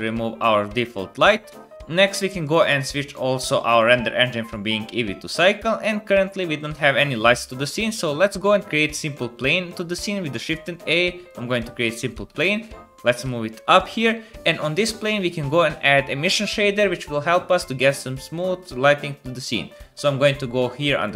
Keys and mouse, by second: 1.5 typing, 2.4 middle click, 2.7 middle click, 3.8-8.4 middle drag, 6.4-8.4 drag, 6.4-8.4 right drag, 8.4 shift+a, 12.2 g, 13.2-16.2 drag.